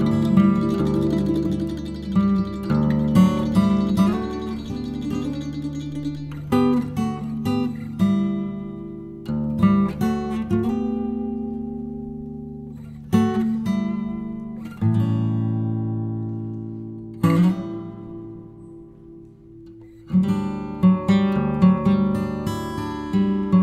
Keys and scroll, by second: 8.9 e, 10.0 s, 13.0 f, 16.4 ctrl+b.